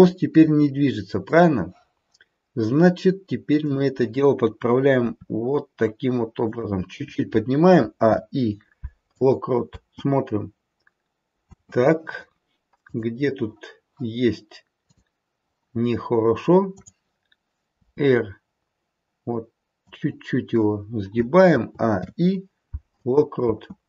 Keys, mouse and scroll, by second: 1.2 click, 3.6 click, 5.0 r, 7.7 a, 7.9 i, 9.6 space, 11.5 space, 12.9 click, 14.9 click, 16.6 click, 17.8 r, 21.4 a, 21.9 i, 23.5 space.